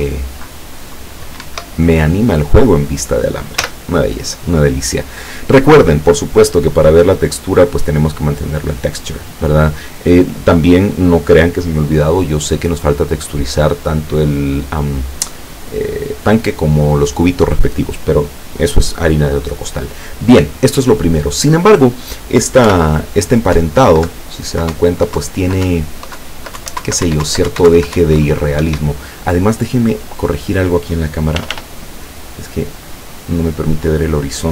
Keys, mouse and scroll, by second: 0.1 Down, 1.5 Escape, 3.7 z, 7.1 click, 8.0 click, 22.7 p, 23.6 Up, 24.1 Down, 24.8 Up, 25.2 Down, 25.8 Up, 26.3 Down, 26.7 Up, 26.9 Down, 27.1 Up, 27.3 Down, 27.6 Up, 27.7 Down, 28.0 Up, 28.7 Escape, 30.0 right click, 31.5 r, 34.0 click.